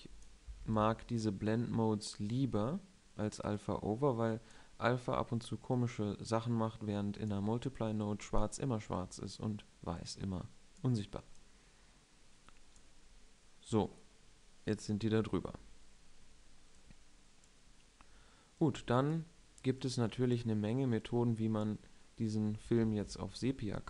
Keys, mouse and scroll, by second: 0.1-1.7 drag, 1.5 ctrl+x, 2.2-2.9 drag, 9.7 click, 13.9-17.5 middle drag, 23.5 shift+a.